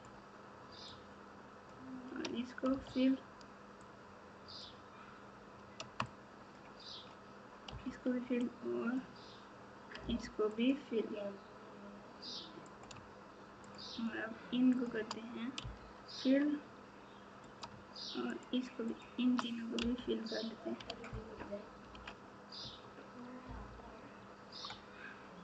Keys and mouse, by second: 0.0 shift+click, 1.1 shift+click, 2.7 f, 4.0 click, 6.1 shift+click, 7.7 f, 8.6 click, 10.5 click, 12.7 click, 13.6 shift+click, 14.7 shift+click, 15.6 f, 17.4 click, 18.8 shift+click, 19.8 f, 20.8 alt+z, 22.6 Tab, 23.4 KP_8.